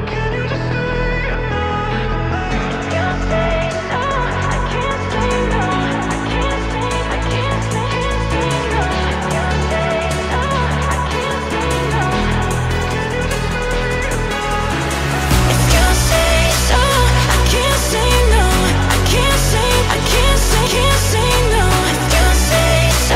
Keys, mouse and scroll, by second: 0.2 shift+click, 0.8 shift+click, 1.3 shift+click, 2.4 ctrl+z, 2.8 shift+click, 3.2 shift+click, 3.6-4.4 middle drag, 4.4 shift+click, 4.8 shift+click, 5.4 shift+click, 6.2 shift+click, 6.6-8.2 middle drag, 8.2 ctrl+j, 8.7 KP_1, 9.2-10.0 shift+middle drag, 10.0 shift+d, 10.3 s, 14.7-15.9 middle drag, 15.9 g, 18.3 KP_1, 18.9 shift+middle click, 19.6-20.1 scroll up 2, 20.1 shift+middle drag, 20.4-20.7 scroll up 1, 20.7 g.